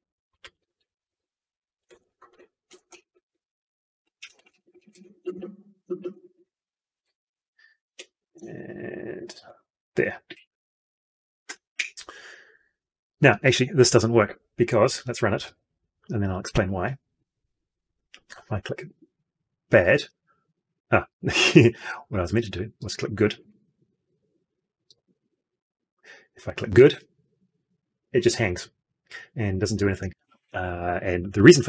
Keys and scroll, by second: 23.3 ctrl+F2.